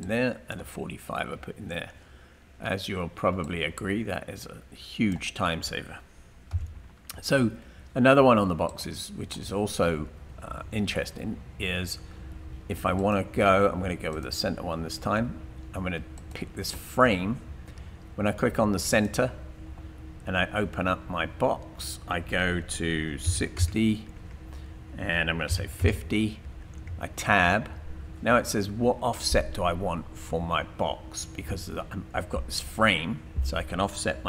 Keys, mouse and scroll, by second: 3.4 click, 6.5 Delete, 8.7 click, 23.3 typing, 24.1 Tab, 25.3-27.7 typing, 26.9 Tab, 31.3-32.0 typing.